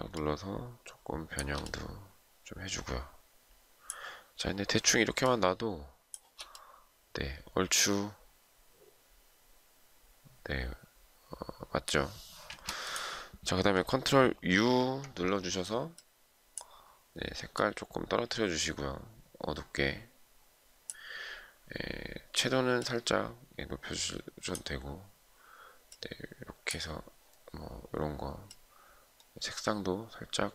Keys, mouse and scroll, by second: 4.8 shift+click, 14.2 ctrl+u.